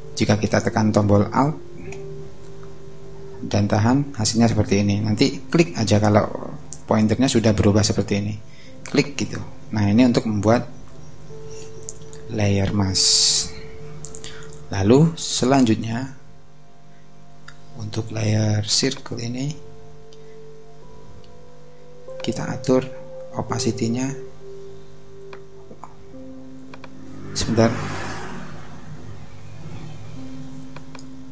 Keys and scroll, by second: 25.9 super+z.